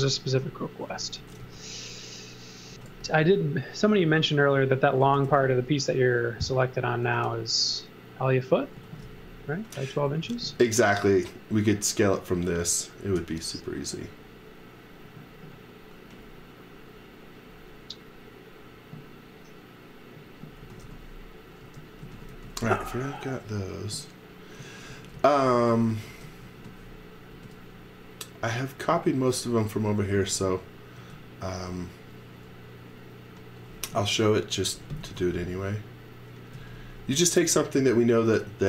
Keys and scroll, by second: 0.0-3.0 typing, 4.0 v, 5.0 x, 5.3 v, 7.1 m, 8.5-10.1 typing, 13.2 r, 20.4-22.3 typing, 23.3 x, 24.4-27.3 typing, 29.2 x, 30.1 x, 31.0 space, 32.0 space, 34.8 m, 36.6 x, 37.9 space.